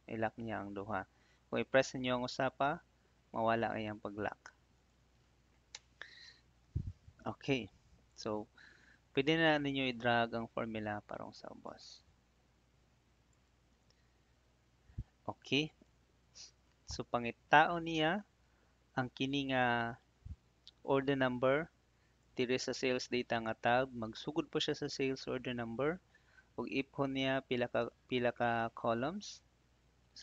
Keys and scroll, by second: 2.1 F4, 3.5 F4, 5.7 Return.